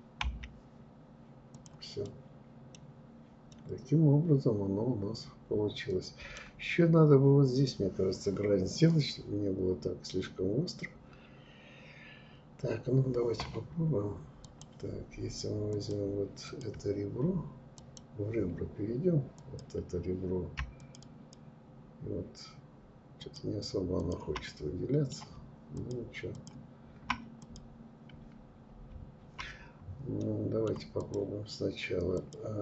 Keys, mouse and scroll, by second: 0.6 click, 1.1 middle click, 1.8 scroll down 4, 2.5-5.6 middle drag, 7.6 scroll down 2, 8.5-9.3 scroll up 2, 12.3 scroll up 1, 13.5-15.2 drag, 15.5 click, 16.8 click, 18.4-20.3 drag, 22.2 shift+click, 23.0 shift+click, 23.5-24.8 middle drag, 24.8 shift+click, 25.4 shift+click, 26.4 click, 28.7-29.3 scroll down 3, 29.3-30.0 middle drag, 30.0 click, 31.2 click.